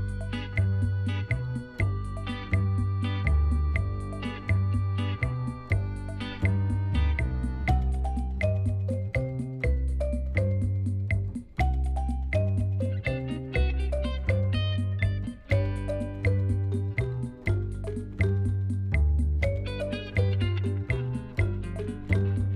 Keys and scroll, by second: 2.2 Tab, 3.4 s, 7.3 s, 9.9 Tab, 18.9 shift+z, 20.5 g.